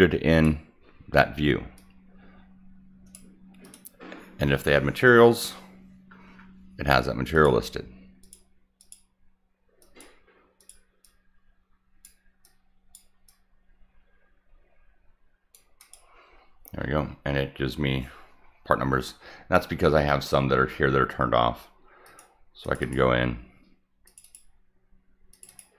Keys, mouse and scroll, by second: 1.7-3.1 drag, 3.6 click, 7.3 click, 8.2 click, 8.7 click, 9.8 click, 10.5 click, 11.0-12.0 drag, 12.4-12.9 drag, 13.2-15.5 drag, 15.7 click, 22.0 click, 22.6 click, 22.8 click, 24.0 click, 24.2 click, 25.3 click, 25.4 click.